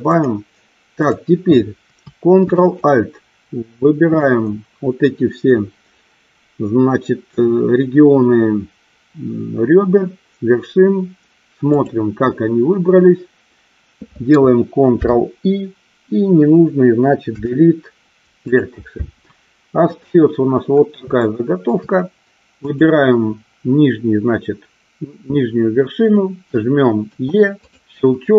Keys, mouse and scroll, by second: 0.3 click, 1.2 click, 2.9 alt+shift+click, 15.1 ctrl+i, 17.3 Delete, 21.3 shift+middle click, 22.7 click, 27.2 e.